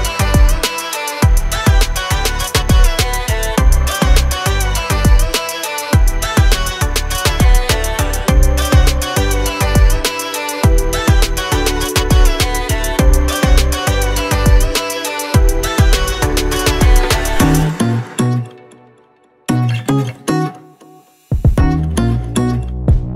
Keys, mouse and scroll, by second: 3.5 click, 4.3 F4, 5.4 F9, 7.5 click, 8.6 click, 10.3-11.0 scroll up 1, 11.0 scroll down 1, 12.3-13.1 scroll up 1, 13.3 ctrl+click, 13.9-14.5 scroll up 1, 15.5 F8, 16.4 click, 17.7-22.0 typing.